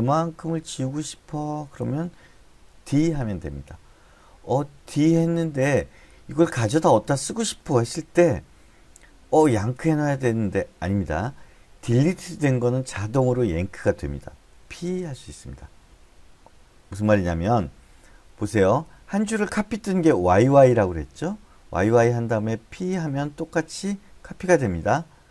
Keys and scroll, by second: 3.2 d, 15.1 p, 18.2-19.6 typing, 20.9 y, 21.1 y, 22.2-24.5 typing.